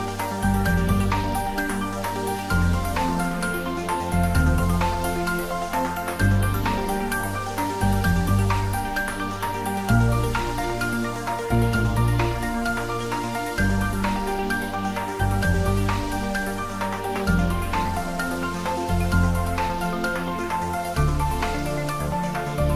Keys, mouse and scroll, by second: 0.6 click, 1.2 scroll down 1, 2.2-2.5 scroll up 1, 3.6 g, 4.1 Left, 7.2 Left, 8.9 click, 9.5-9.9 scroll down 1, 11.2-13.2 middle drag, 13.2 shift+z, 14.2-15.6 middle drag, 15.6 scroll up 1, 17.2-17.7 scroll up 1, 17.8 s, 18.2 z, 19.2 click, 19.4 scroll down 1, 20.6 g, 21.1 z, 22.2 click, 22.5 scroll up 1.